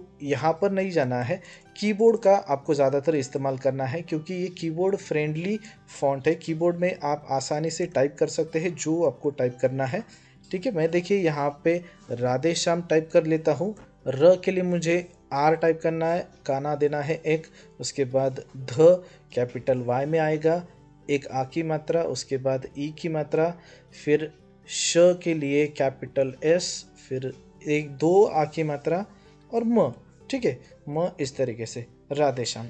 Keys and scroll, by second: 7.6 BackSpace, 9.1 Delete, 12.4 r, 13.6 BackSpace, 15.2-16.5 typing, 19.2-19.9 typing, 20.9 typing, 22.5 typing, 25.7-26.8 typing, 28.7-31.0 typing.